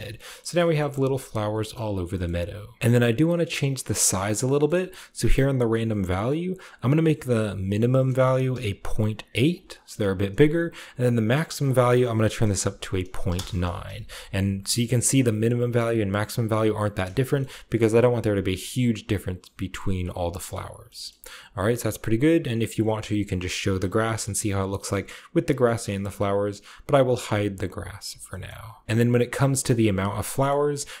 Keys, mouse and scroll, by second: 0.1 shift+scroll up 2, 0.3-0.6 shift+middle drag, 0.5 shift+scroll down 2, 0.8 shift+scroll up 2, 1.0-1.4 shift+middle drag, 1.0 typing, 1.6-2.0 shift+middle drag, 1.8 scroll down 1, 2.1 shift+middle click, 4.5 middle drag, 4.6-5.2 scroll up 1, 5.2-6.6 drag, 5.2 scroll up 1, 7.7 click, 8.6-9.3 typing, 9.4 click, 11.5 click, 12.4-13.1 typing, 13.2 Return, 14.0-16.1 scroll up 1, 17.3-19.9 shift+middle drag, 17.3-19.9 shift+scroll up 1, 19.9-23.0 scroll down 1, 20.4-20.7 shift+middle drag, 21.0-23.0 shift+middle drag, 23.0 click, 27.4 click, 27.9-28.3 scroll down 2, 28.1 middle click, 28.3-28.8 scroll up 2, 29.4 shift+middle click, 30.2-31.0 shift+scroll up 2.